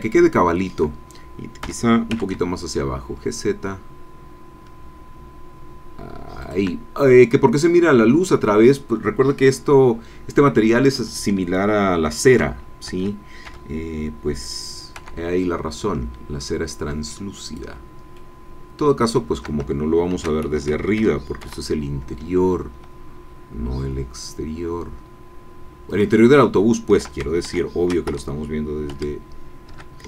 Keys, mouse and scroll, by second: 0.0 shift+click, 1.6 g, 2.1 z, 6.4 shift+click, 12.4 shift+d, 12.8 Escape, 13.4 g, 15.0 y, 17.5 shift+click, 18.1-19.4 shift+middle drag, 20.1 shift+d, 20.5 shift+Escape, 21.0 shift+g, 21.4 shift+y, 25.9 shift+click, 26.4 shift+middle click, 27.5 shift+f, 28.1 shift+Escape, 28.9 g, 29.7 Escape.